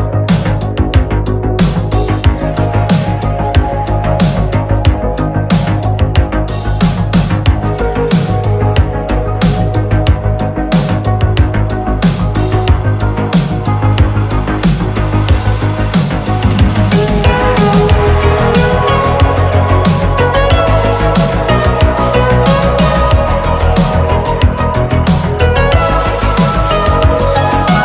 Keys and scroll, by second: 1.8 ctrl+z, 2.6 space, 3.0 space, 4.9 ctrl+z, 5.3 space, 11.2 space, 13.1 space, 14.0 space, 14.6 ctrl+z, 23.5-26.4 typing, 27.0 ctrl+z, 27.7 ctrl+z.